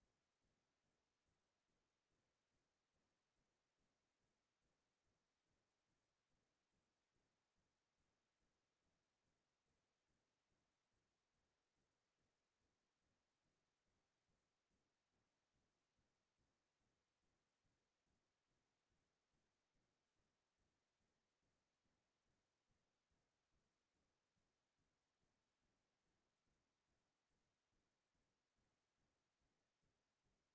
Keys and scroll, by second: 6.9 ctrl+r, 8.8 ctrl+r, 10.5 ctrl+y.